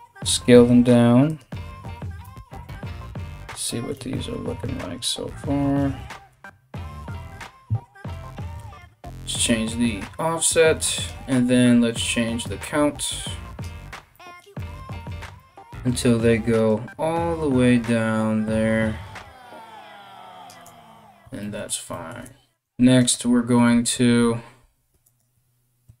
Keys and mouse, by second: 1.0-20.8 middle drag, 1.9 Tab, 8.5-26.0 shift+drag, 22.6 middle click, 22.6 right click, 23.6 Tab, 24.7 middle click, 24.7 right click.